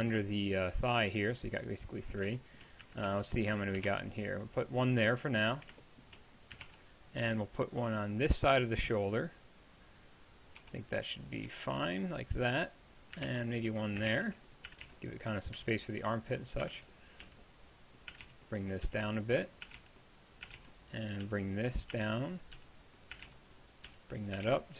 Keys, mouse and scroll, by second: 3.1 z, 3.9 ctrl+r, 10.6 r, 11.5 g, 13.3 ctrl+r, 14.1 ctrl+Tab, 14.7 a, 14.9 b, 15.6 g, 16.7-24.7 typing.